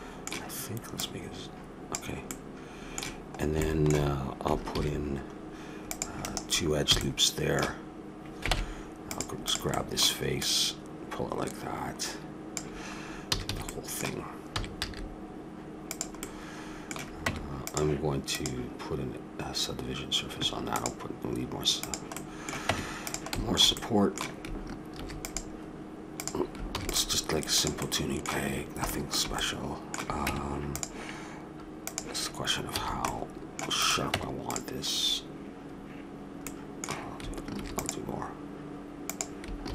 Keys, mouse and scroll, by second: 1.0-2.8 drag, 2.3-3.7 middle drag, 4.7 ctrl+r, 6.9 a, 8.5 ctrl+Tab, 9.4-12.5 drag, 13.2 a, 13.5 a, 13.7-15.5 middle drag, 14.5 s, 17.2 Tab, 18.3-20.1 drag, 21.8 click, 22.2-23.9 middle drag, 22.6 Tab, 24.9 ctrl+r, 26.7 ctrl+r, 27.8-30.4 middle drag, 30.3 Tab, 31.9-33.7 drag, 32.8 a, 33.8-34.8 drag, 34.1 Tab, 35.5 click, 37.5 ctrl+r, 39.6 ctrl+r.